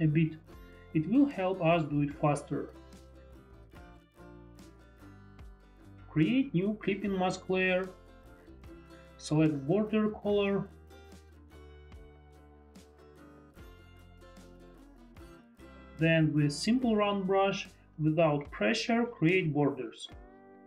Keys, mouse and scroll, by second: 3.1 F4, 3.9 F3, 3.9 F4, 5.4 F3, 12.4 ctrl+click, 17.1 ctrl+click, 17.7 ctrl+click, 18.3 Tab, 19.5 Tab.